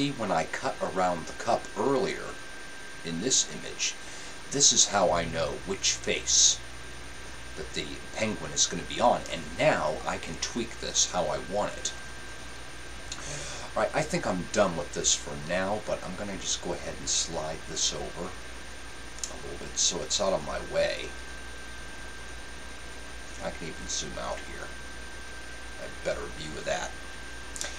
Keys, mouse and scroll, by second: 20.7-22.0 drag.